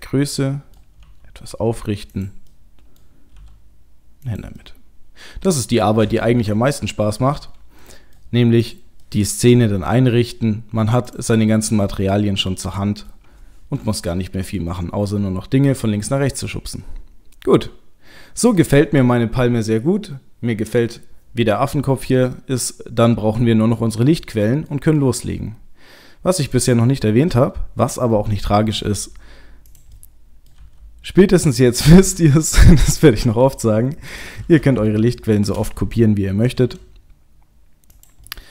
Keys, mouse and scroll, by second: 1.0 r, 2.5 middle click, 3.4 g, 4.6 middle click, 5.7 middle click, 6.3 KP_0, 7.2 KP_0, 7.8 middle click, 8.6 click, 9.1 middle click, 9.6 middle click, 9.8 r, 11.3 middle click, 13.8 KP_0, 15.3-16.8 scroll up 4, 16.8-18.7 scroll down 1, 23.8-24.5 scroll down 3, 24.3 middle click, 25.0 middle click, 25.3-26.4 scroll down 2, 26.4 click, 26.4 scroll down 1, 26.9 middle click, 28.7 g, 30.0 middle click, 30.5 g, 31.7 middle click, 32.8 middle click, 33.4 g, 34.9 shift+middle click, 35.2 shift+middle click, 36.6 shift+d, 38.3 middle click.